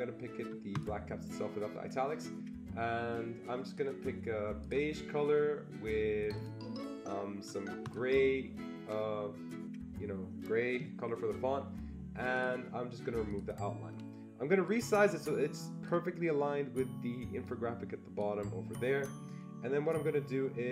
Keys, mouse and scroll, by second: 0.7 click, 3.7 click, 4.6 click, 6.3 click, 7.8 click, 12.3 click, 13.3 click, 14.7-20.7 drag.